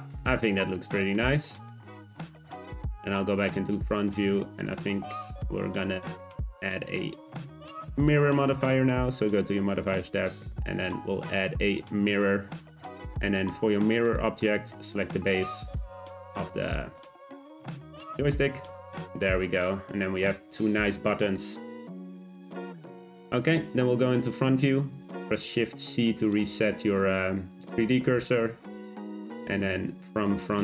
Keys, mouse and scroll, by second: 2.1 `, 3.8-4.6 shift+middle drag, 4.6 click, 6.2-9.2 middle drag, 11.7-12.8 drag, 12.8-14.1 scroll down 2, 14.1 click, 18.5 click, 19.0-22.0 middle drag, 22.8-23.3 scroll down 2, 23.3 click, 23.5 `, 25.1 shift+c, 28.3 shift+a, 29.0 click, 29.2 z, 30.4 click.